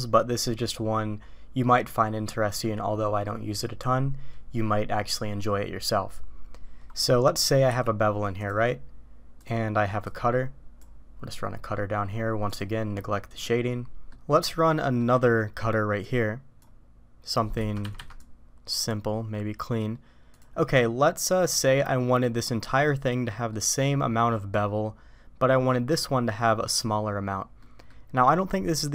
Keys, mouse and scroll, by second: 0.6-2.6 middle drag, 7.4 middle click, 7.7 q, 10.0-12.6 drag, 13.4-14.1 middle drag, 14.7 middle click, 16.0-17.8 drag, 17.8 Escape, 18.0 Escape, 18.2-20.4 drag, 20.7-21.6 middle drag, 23.4-24.5 middle drag, 27.6 middle click.